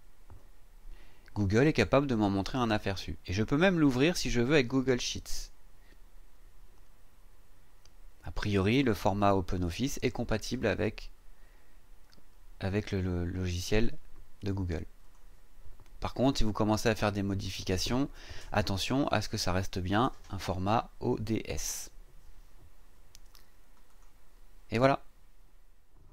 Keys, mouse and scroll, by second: 2.1-2.5 scroll up 2, 5.0 click, 15.0 click, 23.9 click.